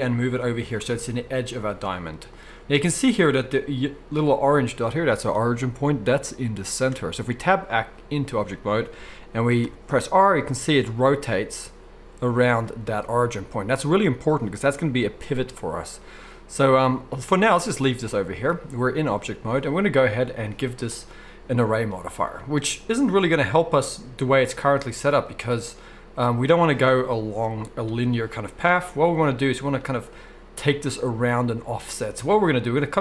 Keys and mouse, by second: 6.9 Tab, 9.5 r, 11.2 r, 20.3 click, 20.4 middle click, 21.0-33.0 drag.